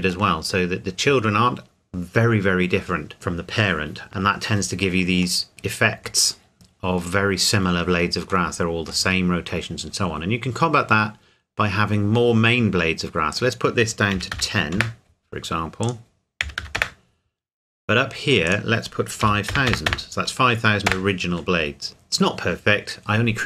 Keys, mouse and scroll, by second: 5.4 middle click, 8.5 middle click, 9.8-12.1 scroll up 1, 13.3 click, 14.1 KP_1, 14.3 KP_0, 14.7 KP_Enter, 15.8 click, 16.4 KP_1, 16.6 KP_0, 16.7 KP_Enter, 18.5 click, 19.2 KP_5, 19.5 KP_0, 20.9 KP_Enter.